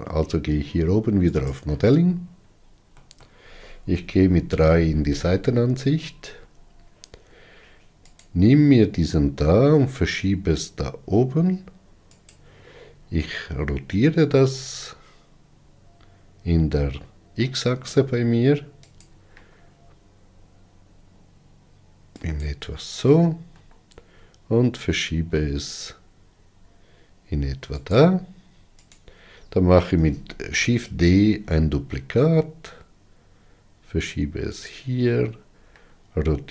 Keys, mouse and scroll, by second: 1.7-2.9 drag, 2.9 scroll down 3, 3.4-4.4 middle drag, 4.4 KP_3, 6.0-6.8 scroll up 5, 8.6 click, 9.7 g, 14.5 r, 19.8 r, 24.0 g, 29.4 click, 31.0 shift+d, 36.2 r.